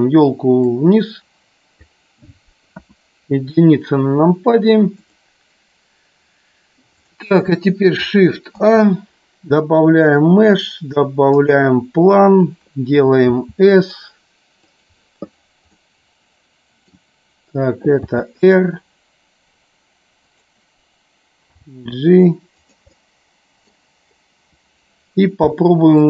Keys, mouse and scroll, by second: 0.9 click, 2.9 KP_1, 5.0-5.4 drag, 6.9 click, 8.6 shift+a, 14.7 click, 15.7-16.9 middle drag, 20.3 click, 22.6 click, 23.0-23.7 middle drag.